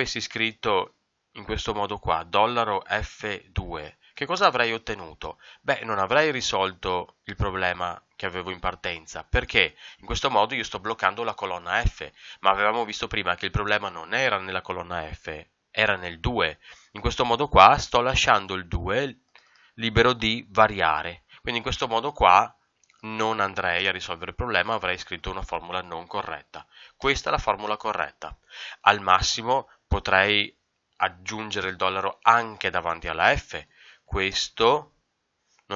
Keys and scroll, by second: 4.3 ctrl+Return, 18.7 Escape, 21.2 Escape, 34.2 ctrl+Return.